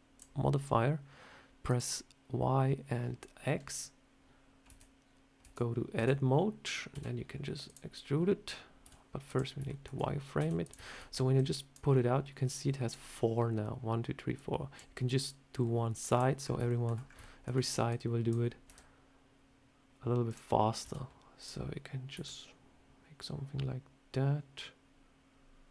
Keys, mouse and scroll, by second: 1.6 click, 3.2 scroll up 1, 4.6 Tab, 5.3 Tab, 5.9 Tab, 6.8 s, 8.7 z, 9.6 shift+middle click, 10.3 s, 10.7-11.4 shift+scroll down 3, 11.2 click, 11.8 scroll down 2, 12.3 click, 14.2 click, 15.2 click, 16.3 scroll up 4, 16.6 shift+middle click, 16.9 scroll up 2, 17.1 shift+middle click, 17.8 click, 18.6 r, 20.7 s, 22.0 s.